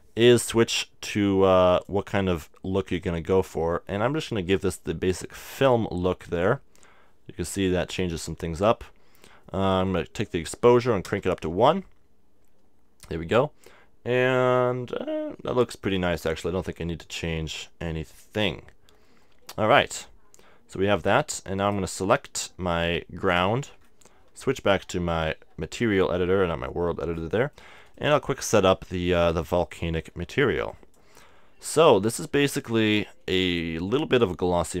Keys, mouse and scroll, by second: 0.5-3.6 drag, 6.6-9.9 middle drag, 9.9-11.7 drag, 11.1 KP_Decimal, 15.0-21.2 middle drag, 21.6-23.4 right drag, 25.8-27.5 drag, 27.3-31.6 middle drag, 30.7-33.9 drag, 33.9-34.8 middle drag.